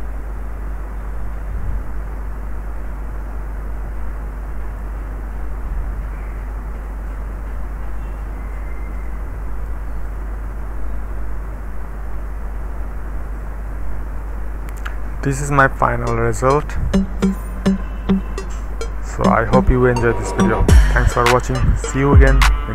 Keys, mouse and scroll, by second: 4.9-9.8 drag, 14.2-20.3 drag.